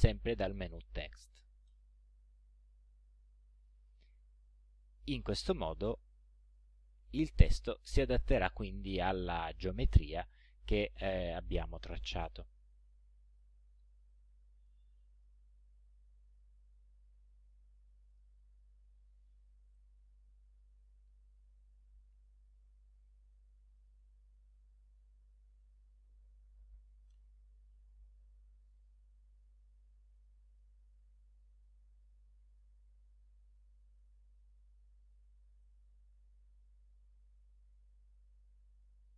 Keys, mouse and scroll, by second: 1.7 click, 3.1 ctrl+scroll up 2, 4.4 click, 5.7-6.8 drag, 8.0 click, 11.9 click, 14.1 click, 17.9 click, 19.8-22.0 drag, 22.5 ctrl+c, 23.0 ctrl+v, 23.8 ctrl+click, 25.7 click, 26.8 Right, 27.1 Return, 27.7 ctrl+v, 30.2 click, 31.3 click, 32.5 click, 34.0 click, 35.6 click, 37.4 click.